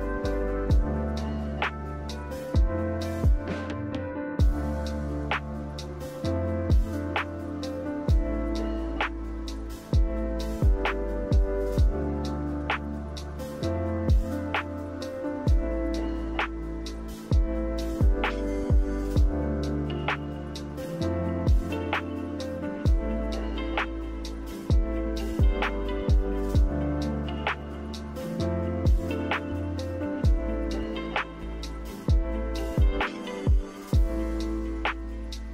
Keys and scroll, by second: 4.7-5.5 typing, 6.6 5, 13.1 1, 32.1 1.